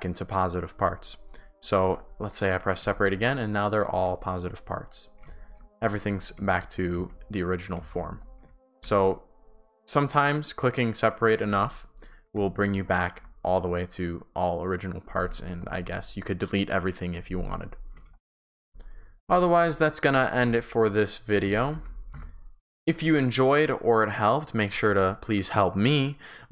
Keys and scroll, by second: 0.2 shift+w, 1.8 shift+s, 3.8 shift+a, 5.5 shift+a, 6.5 ctrl+z, 8.7 shift+w, 12.2 shift+w, 15.2 shift+s, 15.6 shift+w, 17.7-22.6 typing.